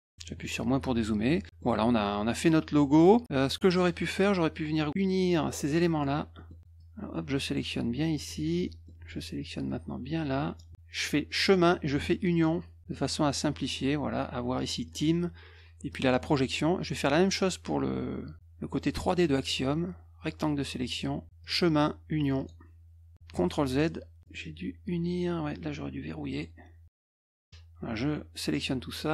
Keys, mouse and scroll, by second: 0.1 -, 0.3 -, 0.8 F1, 1.3 click, 1.5 middle click, 4.2-5.8 drag, 6.3 middle click, 6.7-8.2 drag, 8.6 middle click, 9.6 click, 11.3 click, 12.3 click, 14.8 click, 15.9 click, 19.4-20.9 drag, 21.4 click, 22.3 click, 23.3 ctrl+z, 24.2 click, 26.3 click, 27.5-28.5 drag.